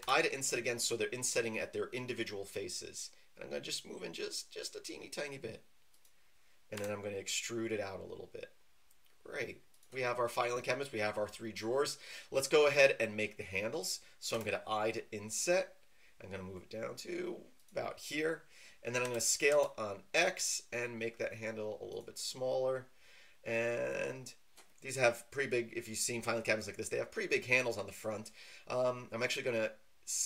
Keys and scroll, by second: 6.7 e, 14.3 i, 19.0 s, 19.5 x.